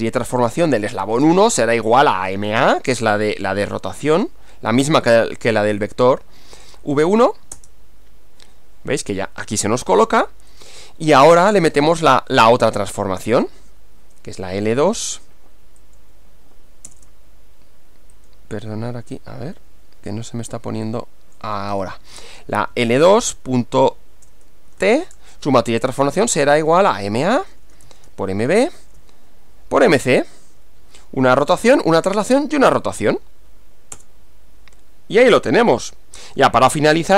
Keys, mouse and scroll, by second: 0.0-2.3 typing, 5.1 click, 5.8 click, 7.6 Return, 10.6 click, 11.3-12.2 typing, 13.6 click, 14.1-15.1 typing, 15.9 click, 16.9 Return, 18.2 click, 20.9 click, 21.8 click, 22.5-30.6 typing, 34.0 Return.